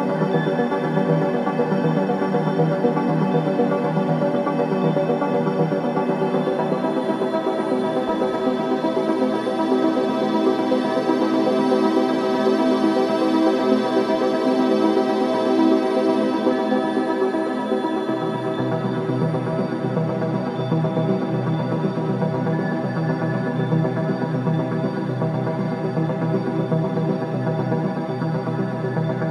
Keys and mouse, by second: 6.3 click, 6.9 click, 7.4-8.4 drag, 8.9 click, 10.1-11.3 drag, 13.3 right click, 15.4 click, 16.9 click, 17.9 click, 20.3 alt+click, 21.6 click, 24.5-26.6 drag, 26.7 space.